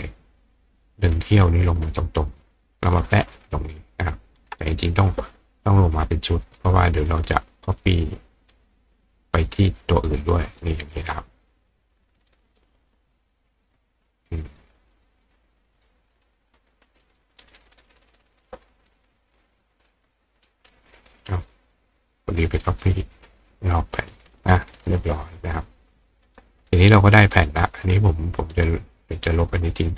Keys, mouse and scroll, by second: 0.3 click, 1.2 click, 2.2-3.4 ctrl+drag, 6.4 click, 7.2 click, 9.3 ctrl+click, 10.6-11.9 ctrl+drag, 12.6-13.3 right drag, 13.3 click, 15.4 click, 16.8-18.5 drag, 17.2 right drag, 19.9-21.1 drag, 20.5 right click, 22.1-24.2 drag, 22.6 right click, 24.8 click, 26.0 click, 26.3 right click, 27.3 right click, 28.4 right click, 29.7 click.